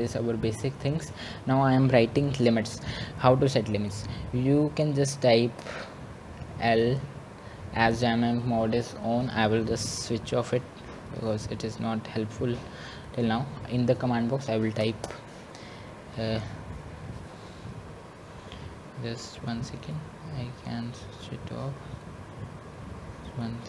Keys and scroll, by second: 15.4 1.